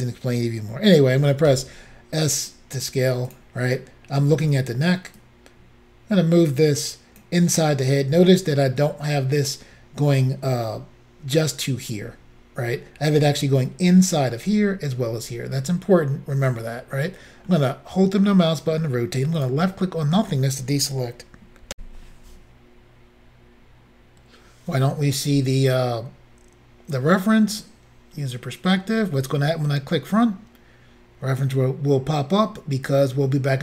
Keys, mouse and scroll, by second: 1.5 s, 3.3 click, 5.2 click, 17.5 middle click, 19.4 click, 21.7 Insert.